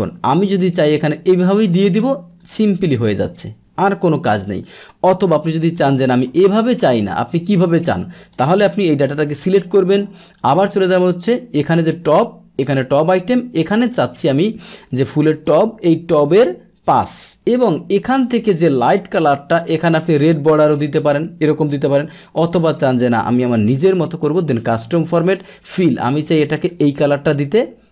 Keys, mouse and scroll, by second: 1.6-3.3 drag, 4.6-6.4 drag, 6.4-8.2 middle drag, 8.2 click, 8.7-9.9 ctrl+shift+middle drag, 9.0 ctrl+shift+Down, 9.2 ctrl+shift+Down, 10.5 click, 12.7 click, 18.0 click, 20.0 click, 22.4 click, 23.7 click, 25.2-26.2 drag, 26.7 click.